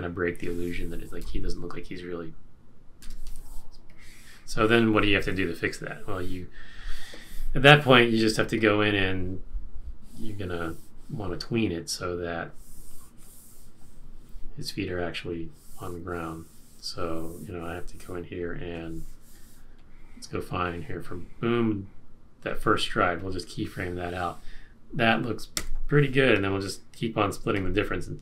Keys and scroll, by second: 1.2 Return, 3.0 Return, 25.5 F6.